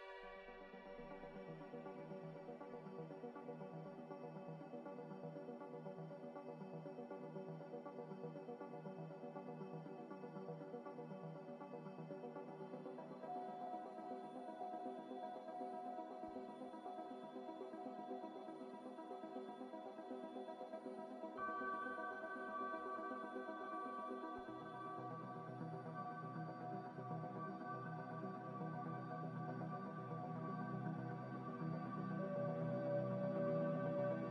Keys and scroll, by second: 14.8 F9, 16.3 z, 19.7-20.6 typing, 30.2-31.2 typing.